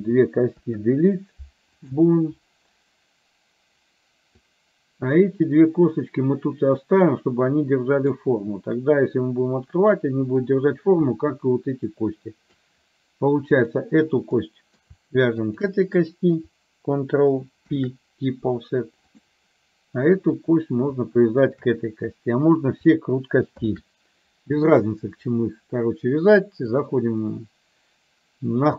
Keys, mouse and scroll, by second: 0.6 Delete, 4.6 click, 7.1-8.2 middle drag, 14.3 middle click, 15.6 shift+click, 17.7 ctrl+p, 20.2 click, 23.6 ctrl+p, 26.8-28.7 drag.